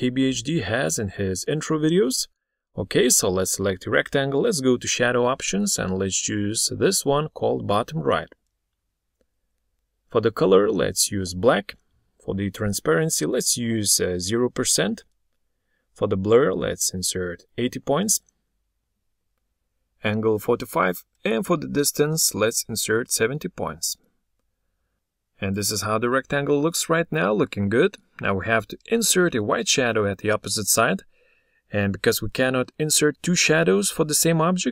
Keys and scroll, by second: 32.9 ctrl+d.